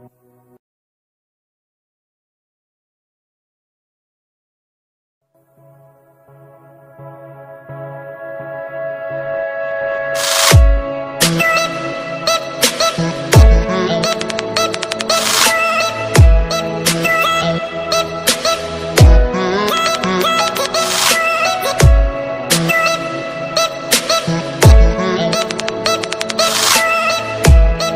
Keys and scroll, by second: 1.6 ctrl+space, 2.6 alt+space, 12.8 ctrl+space, 16.4 alt+space, 22.9 ctrl+alt+z.